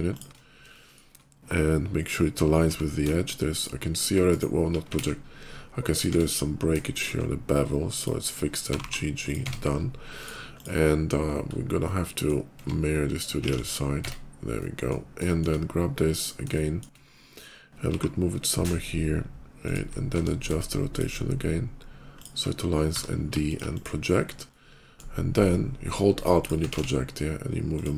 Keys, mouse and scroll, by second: 0.0 ctrl+shift+click, 0.6 shift+middle click, 2.5 d, 3.4 click, 4.1 click, 4.8 ctrl+z, 5.6 click, 5.9 Tab, 6.3 middle click, 6.7 shift+middle click, 7.7 shift+click, 8.5 g, 8.7 g, 9.1 click, 9.2 Tab, 10.0 click, 10.4 click, 11.0 middle click, 11.3 middle click, 11.6 middle click, 12.5 Tab, 13.3 alt+x, 13.8 Tab, 14.0 alt+x, 14.4 middle click, 15.1 middle click, 16.0 shift+click, 16.4 shift+middle click, 17.6 g, 18.4 ctrl+g, 19.5 ctrl+click, 20.0 d, 20.6 ctrl+shift+d, 20.8 click, 22.0 ctrl+shift+click, 22.7 d, 23.2 alt+d, 23.3 click, 23.6 click, 24.1 middle click, 24.3 middle click, 26.7 alt+x, 27.6 click.